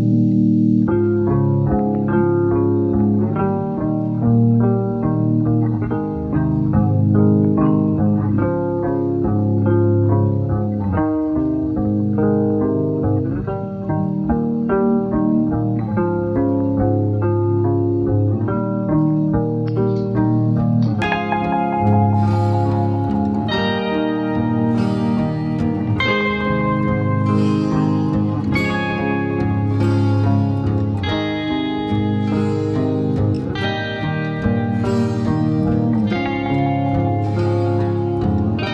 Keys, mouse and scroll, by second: 1.2 shift+a, 3.8 s, 5.2 g, 6.9 click, 7.5-8.1 scroll up 1, 8.1 click, 8.9 click, 9.6 Tab, 10.0 3, 10.7 click, 13.1 e, 14.1 scroll down 4, 15.2 g, 16.2-16.7 scroll down 2, 16.7 scroll up 1, 18.5 e, 20.2-20.9 scroll down 2, 20.9 click, 21.3-21.9 scroll up 3, 24.7-25.6 scroll down 1, 25.6 e, 26.8 s, 28.5 e, 29.5 s, 30.9 e, 31.8 s, 32.8-33.5 scroll up 5, 33.5 click, 34.4 Tab, 35.2-36.5 right drag, 36.5 scroll down 6, 37.5 click, 38.2-38.7 drag.